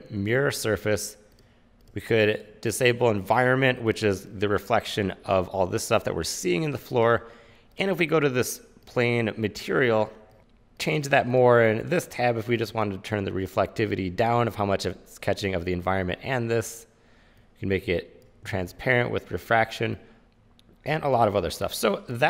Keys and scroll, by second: 10.4 super+z, 18.7 super+z.